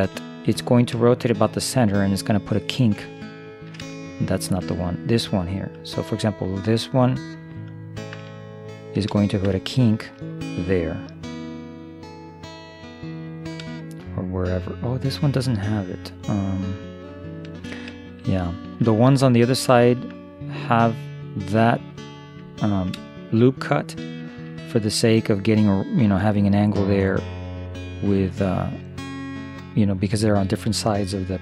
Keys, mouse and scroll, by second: 3.2-5.8 middle drag, 6.1 middle click, 6.3 middle click, 8.6 middle click, 8.8 middle click, 9.8 middle click, 12.9-15.4 middle drag, 18.1-20.9 middle drag, 22.6-27.1 middle drag, 30.5-31.4 middle drag.